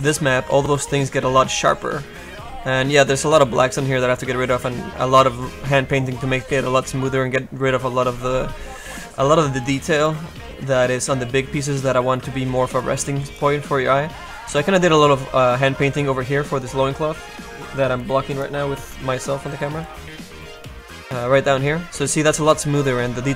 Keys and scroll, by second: 2.8 g, 3.6 s, 6.0 space, 7.5-8.2 typing, 9.5 space, 12.6 space, 14.0 F1.